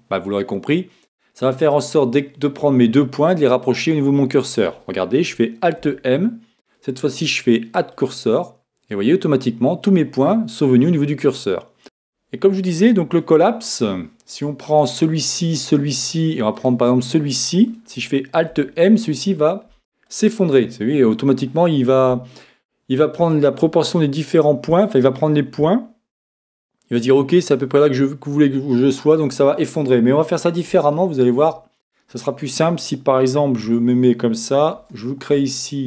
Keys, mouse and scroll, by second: 5.8 alt+m, 14.8-18.5 right drag, 18.5 alt+m, 30.4-33.0 middle drag, 33.6 Tab, 34.7 shift+a.